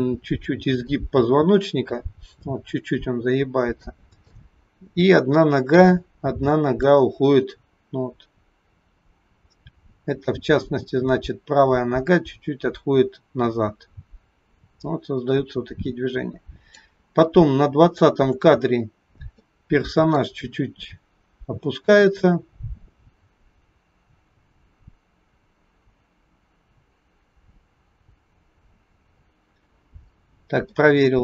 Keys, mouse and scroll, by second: 0.8 click, 4.4 shift+middle click, 6.9 click, 17.8-19.1 scroll down 7, 19.4 scroll down 2, 19.5 shift+middle click, 30.7 shift+middle click.